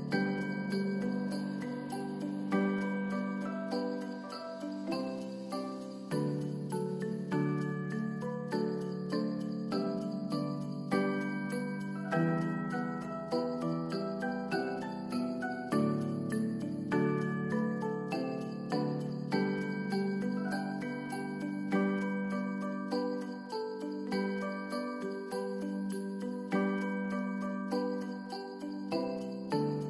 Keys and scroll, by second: 11.8 ctrl+s, 17.2 Return, 17.3-18.2 typing, 20.8 ctrl+s.